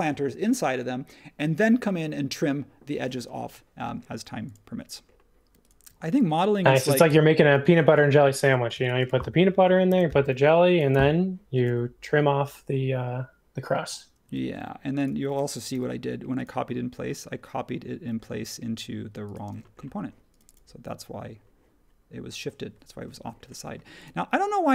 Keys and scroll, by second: 3.7 space, 9.8 super+c, 10.9 BackSpace, 14.4 super+z, 15.7 m, 19.5 space.